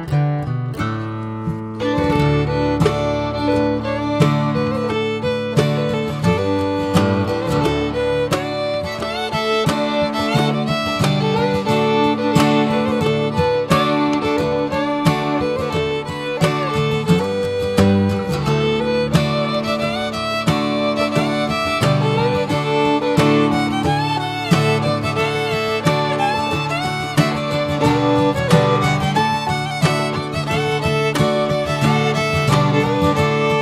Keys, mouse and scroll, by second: 0.8 shift+middle click, 1.6 /, 2.0 drag, 2.3 click, 2.9 Tab, 3.3-4.5 middle drag, 4.5 alt+z, 5.3 click, 6.4 click, 6.6 click, 8.6 3, 8.8 click, 10.4 x, 11.9 alt+z, 12.2 Tab, 16.3 click, 16.6 scroll down 2, 17.0 middle click, 17.3 drag, 17.8 ctrl+1, 18.1 ctrl+2, 18.8 right click, 18.9 click, 19.3 alt+middle click, 19.7 alt+middle click, 20.1 click, 20.4 Tab, 20.7 scroll up 1, 21.1 middle click, 21.8 click, 22.5 click, 23.4 1, 23.5 click, 23.9 middle click, 24.8 ctrl+shift+b, 28.7 ctrl+shift+b, 31.8 scroll down 3, 32.0 Tab, 32.2 drag, 32.5-33.2 middle drag, 33.2 click, 33.4 Tab.